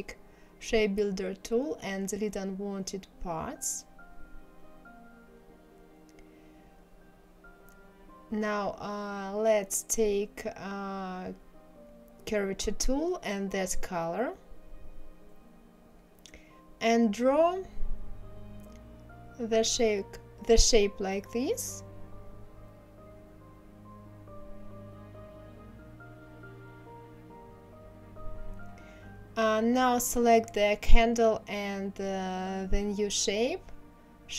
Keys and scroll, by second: 24.5 ctrl+z.